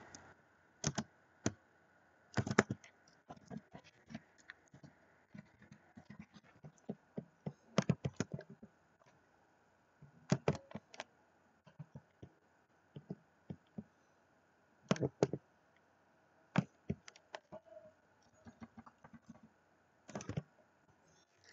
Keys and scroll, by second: 5.6 i.